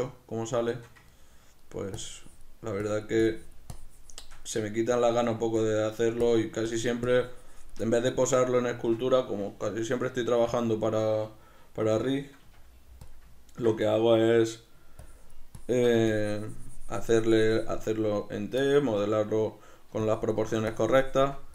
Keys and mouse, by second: 0.0 ctrl+d, 0.8-2.1 shift+middle drag, 2.1-4.5 drag, 4.5 middle click, 5.0 click, 5.9 middle click, 6.3-8.0 drag, 8.0-13.2 middle drag, 12.5 f, 13.2 click, 15.1-21.5 ctrl+drag.